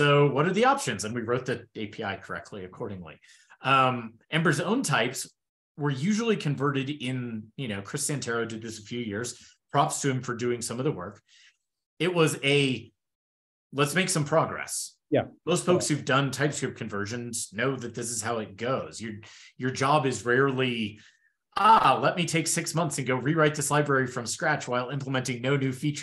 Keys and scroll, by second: 3.8 shift+super+[.